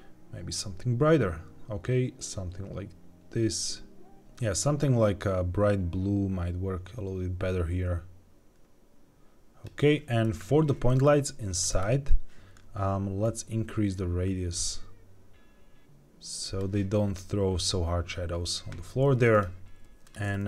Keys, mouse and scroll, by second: 11.4 click, 11.6 click, 13.1-16.5 drag, 19.2 click, 19.7 g, 19.8 z, 19.9 click.